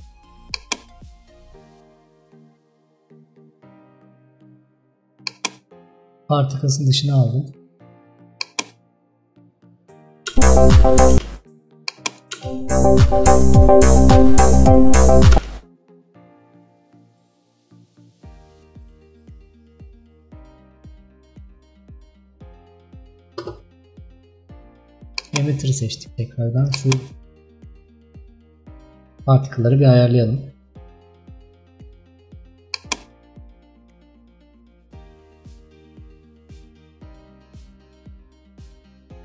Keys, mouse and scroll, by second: 0.5-3.6 drag, 7.5 click, 9.5 click, 10.4 space, 11.2 space, 11.9 click, 12.4 space, 25.3 click, 32.9-39.2 drag.